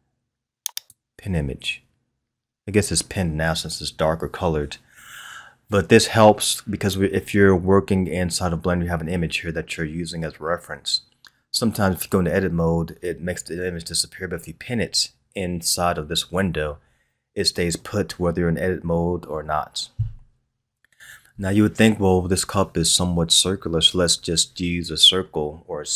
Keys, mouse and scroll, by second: 0.7 click, 11.9-12.6 scroll up 2, 20.1-21.5 scroll up 2.